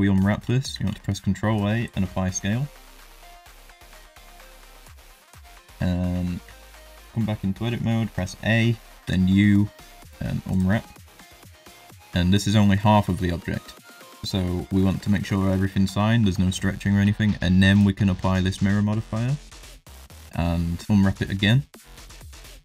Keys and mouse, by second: 0.7 ctrl+a, 2.5 middle drag, 3.8 shift+middle drag, 4.0 middle drag, 6.0 Tab, 6.4 a, 9.0 u, 13.0 shift+middle click.